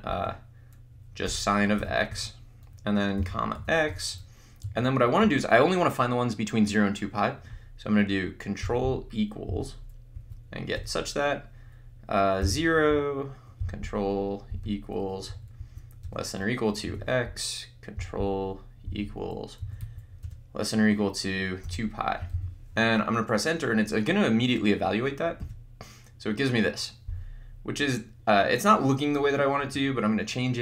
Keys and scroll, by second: 1.3 Return, 1.8 x, 2.1 Right, 3.2 ,, 3.6 x, 4.6 Right, 9.7 =, 10.2 Left, 10.7 Return, 12.4 0, 14.7 =, 15.4 Right, 15.7 Down, 16.0 Return, 16.9 x, 19.1 ctrl+=, 19.7 Right, 19.9 Down, 20.2 Return, 21.6-22.8 typing, 25.4 Return.